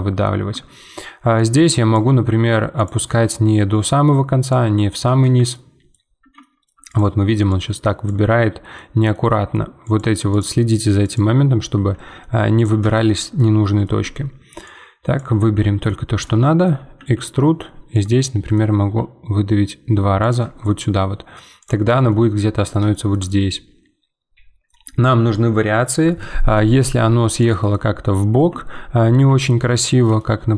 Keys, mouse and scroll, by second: 0.5 Tab, 1.3-2.5 drag, 2.7-5.2 drag, 5.2 z, 5.5-6.9 middle drag, 6.9-8.4 drag, 8.4-9.8 middle drag, 9.8-11.7 drag, 11.7 z, 12.2 middle click, 12.5 click, 12.9-14.0 shift+middle drag, 14.0 z, 14.6 click, 15.5 z, 15.8-16.9 middle drag, 16.9 e, 18.2 middle click, 18.7 e, 20.4 Tab, 20.6 middle click, 21.6 click, 21.9 scroll down 3, 22.1-26.3 middle drag, 26.7-27.9 middle drag, 27.9-30.5 scroll up 1.